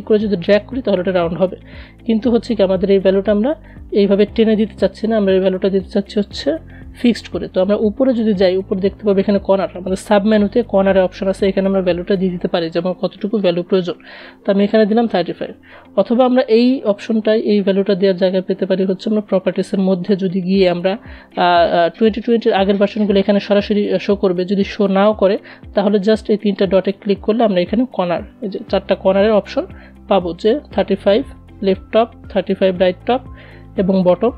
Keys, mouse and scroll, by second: 2.0-9.6 drag, 9.6 click, 10.7 ctrl+a, 17.4 click, 25.1 click, 27.4 click, 29.3-34.3 drag.